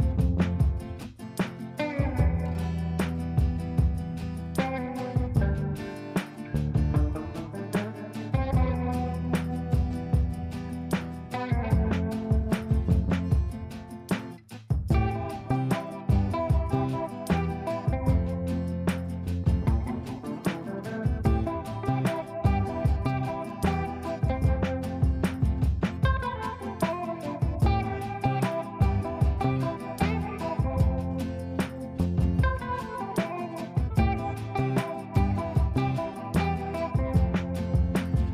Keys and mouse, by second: 0.8-3.3 drag, 4.9 c, 5.8 click, 7.8-10.9 shift+drag, 14.2-16.3 drag, 19.5-21.6 shift+drag, 27.1-28.6 shift+drag, 34.1 Down, 38.2 shift+click.